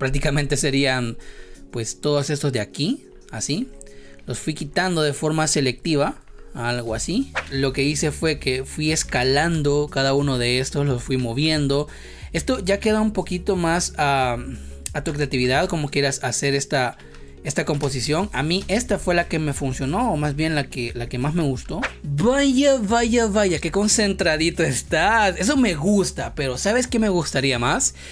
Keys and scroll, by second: 0.3 Delete, 17.8 space.